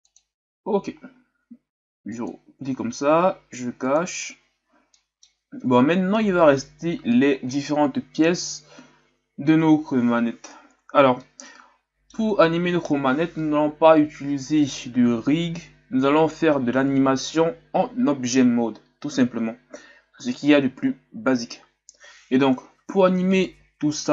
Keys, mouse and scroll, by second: 2.0 click, 3.8 click, 4.4-4.8 scroll up 2, 4.9-23.3 middle drag, 23.3 right click.